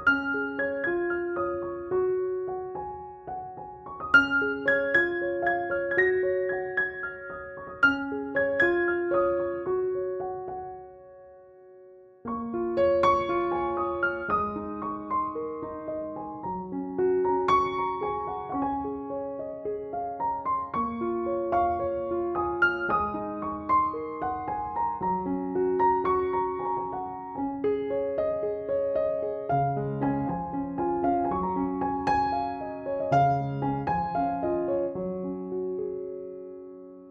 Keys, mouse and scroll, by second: 0.2 click, 3.7 ctrl+click, 3.9 ctrl+e, 4.1-6.6 typing, 4.3 click, 4.9 ctrl+=, 5.8 click, 7.5 ctrl+=, 8.2 shift+l, 8.8 click, 16.2 BackSpace, 16.5 click, 19.2 BackSpace, 19.6 click, 25.6 shift+F6, 26.5 ctrl+-, 27.5 ctrl+j, 28.3 ctrl+u, 29.1-31.7 drag, 33.9 ctrl+-, 34.8 ctrl+=, 36.8 ].